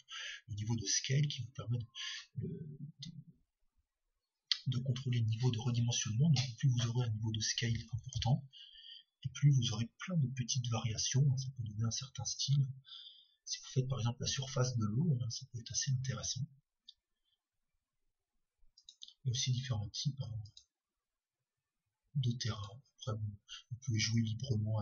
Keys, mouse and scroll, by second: 1.4 click, 20.4-21.5 drag, 23.5-24.8 drag.